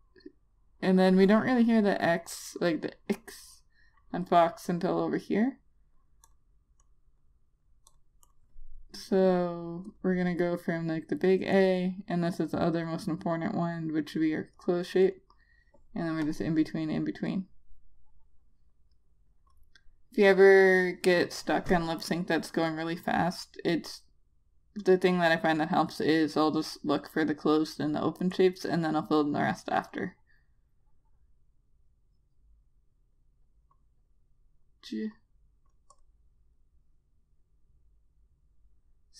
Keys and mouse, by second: 8.9 double click, 11.0 click, 25.5 click, 30.6 click.